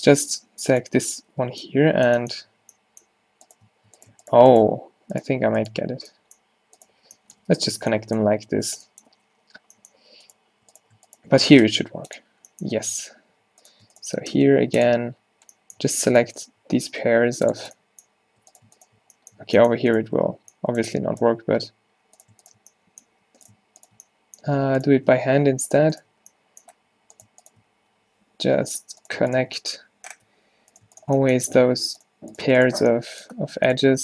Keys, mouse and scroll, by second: 1.1 f, 1.3 f, 2.4 a, 2.6 a, 4.9 g, 5.4 f, 7.0-9.7 typing, 11.7 space, 12.8 a, 14.4 space, 15.9 a, 17.0 space, 19.4 a, 23.2 f, 24.6 f, 26.3 f, 27.8 f, 28.6 ctrl+z, 30.3 f, 31.8 f, 32.8 f.